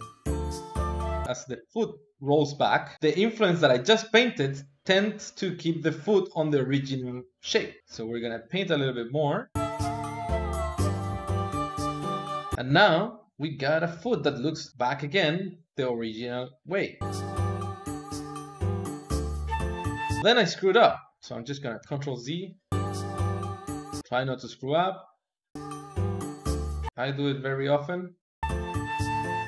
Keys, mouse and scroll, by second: 4.4-5.7 drag, 5.7 middle click, 5.9-7.9 drag, 7.9-10.1 middle drag, 10.1-14.1 drag, 14.1-15.1 middle drag, 15.1-16.3 drag, 16.3-17.4 middle drag, 17.4 KP_2, 17.9 KP_3, 18.5 middle click, 19.4 click, 19.7-21.4 middle drag, 21.4 ctrl+z, 21.6 middle click, 22.4 click, 22.8 middle click, 23.1 click, 23.9 middle click, 24.1-25.6 drag, 25.7 middle click, 25.9 click, 26.4 middle click, 26.6-28.1 drag, 28.3 middle click, 28.8 click.